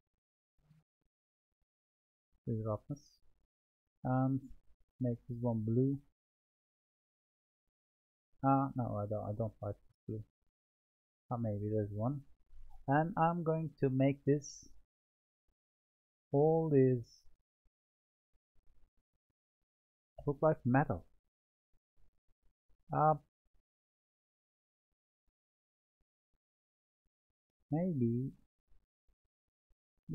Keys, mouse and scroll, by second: 2.0-3.8 drag, 4.7-5.7 drag, 11.6 click, 12.1-12.8 middle drag, 12.8-13.3 scroll up 2, 13.3-14.5 middle drag, 14.5 click, 15.9-21.3 drag, 22.9-23.4 scroll down 3, 23.4-26.5 middle drag, 28.1-28.7 scroll up 3, 28.8-30.1 middle drag.